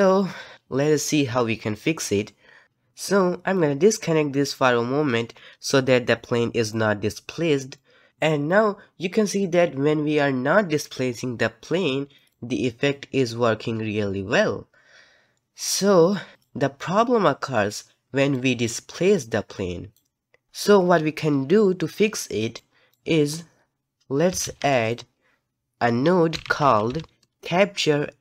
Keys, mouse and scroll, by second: 0.1-2.6 scroll up 1, 2.6 click, 6.7 click, 7.7 middle click, 8.6-15.9 drag, 18.3 click, 19.1-20.5 drag.